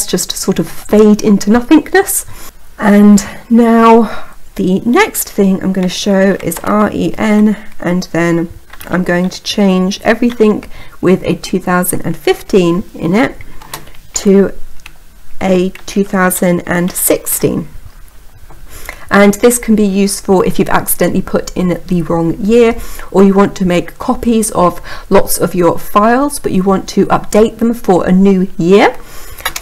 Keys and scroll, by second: 29.3 Return.